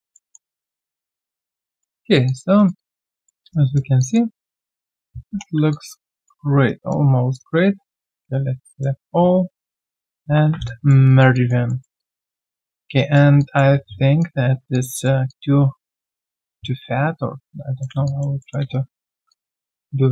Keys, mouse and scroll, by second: 0.1 alt+middle click, 0.5 alt+click, 1.3-1.6 alt+scroll down 1, 1.6 alt+click, 2.0 alt+right click, 2.2 alt+click, 2.5 alt+right click, 2.7 alt+click, 3.1 alt+middle click, 3.5 right click, 3.5 q, 4.0 alt+click, 4.3 alt+scroll down 1, 4.6 alt+click, 5.7 alt+click, 6.6 alt+right click, 7.7 shift+right click, 9.5-10.2 scroll down 1, 10.5 1, 10.6 alt+click, 11.1 alt+right click, 11.3 alt+click, 11.7 alt+middle click, 11.9 alt+click, 12.4 alt+right click, 13.4 alt+click, 13.9 alt+right click, 15.2 alt+click, 17.4-18.6 typing, 18.0 alt+click, 18.4 alt+middle click, 18.7 right click, 19.3 alt+click.